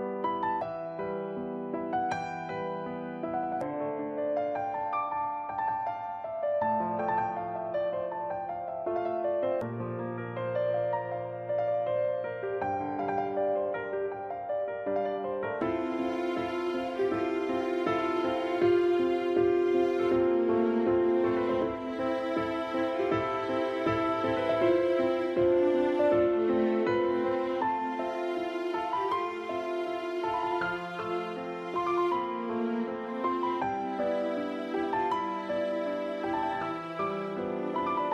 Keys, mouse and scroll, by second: 3.6 click, 5.2 middle click, 10.5-13.3 scroll down 1, 13.3 a, 13.9 right click, 17.4 shift+right click, 20.9 ctrl+p, 32.7 a, 35.8 right click.